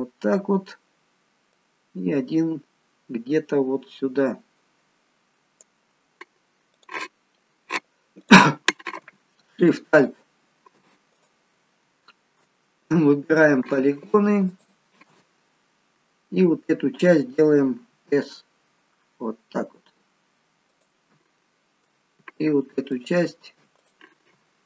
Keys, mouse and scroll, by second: 1.6 click, 6.8 click, 8.3 click, 10.1 alt+shift+click, 11.2 click, 13.4 click, 14.5 alt+shift+click, 15.6-16.3 scroll down 2, 18.0 s, 23.0 alt+shift+click, 23.8 click.